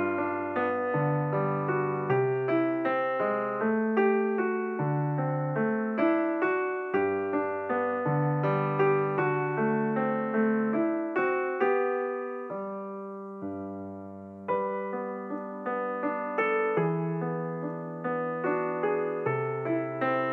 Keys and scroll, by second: 7.0 g, 15.6 g, 19.7 Escape.